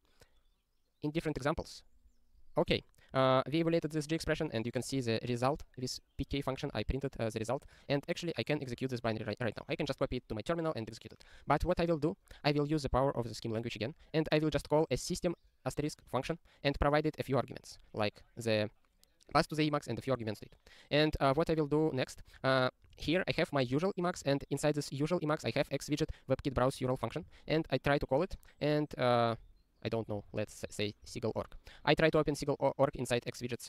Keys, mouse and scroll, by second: 11.7 click, 12.0 scroll down 1, 13.3 click, 14.9 double click, 15.0 double click, 16.0 click, 22.3 alt+x, 22.9 ctrl+g, 24.3 alt+x, 27.3 Return, 31.4 Return.